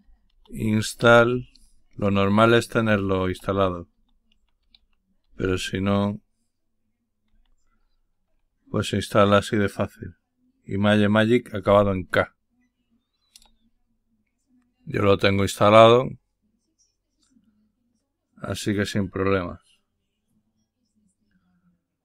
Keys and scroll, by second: 0.0-5.8 typing, 7.2 typing, 11.3-12.0 typing, 13.2 Return, 15.9 typing.